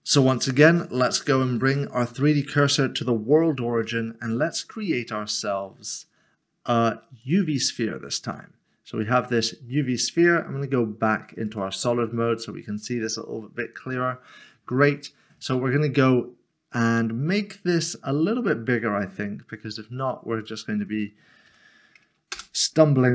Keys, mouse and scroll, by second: 2.5 click, 3.3 scroll up 1, 3.8 shift+middle click, 4.9 a, 7.2 click, 8.5 middle click, 11.5 click, 12.6 scroll up 1, 13.3-14.3 scroll up 1, 14.3 scroll down 1, 14.4 middle click, 16.6 middle click, 16.8 scroll down 1, 20.4-21.5 scroll down 1, 21.5 5, 22.3 Return.